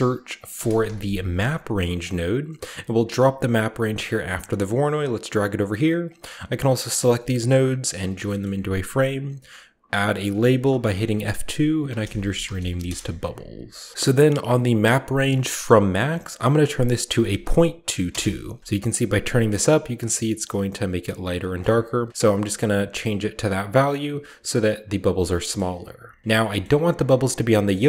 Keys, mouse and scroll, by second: 0.3-0.8 typing, 1.8 click, 3.8 click, 4.2 click, 5.4 click, 5.8 click, 7.5-8.3 typing, 8.2-10.1 ctrl+middle drag, 8.9-11.5 ctrl+drag, 10.1 F2, 11.7-13.8 typing, 13.7 click, 14.3 click, 15.7 click, 17.0-17.7 typing, 17.9 Return, 18.7-21.2 shift+drag, 21.2 shift+middle click, 21.4-22.4 shift+middle drag, 21.6-22.1 shift+scroll down 1, 23.3-23.9 scroll up 2, 24.6 scroll up 1, 25.0 scroll down 1, 25.4 middle click, 25.6-27.2 drag, 25.9-27.2 scroll down 2, 26.2 shift+middle drag, 26.4-27.5 shift+middle drag, 27.2 shift+scroll down 1, 27.2 typing, 27.7-27.8 shift+middle drag.